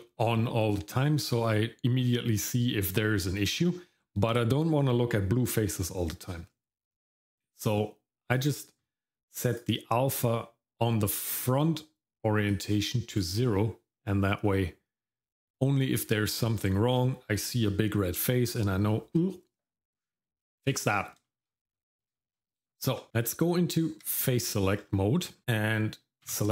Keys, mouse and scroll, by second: 16.7 shift+middle click, 20.8-21.2 scroll down 1, 21.2 shift+middle click, 21.7-22.1 scroll up 1, 22.1 shift+middle click, 23.1 Tab, 26.3 a.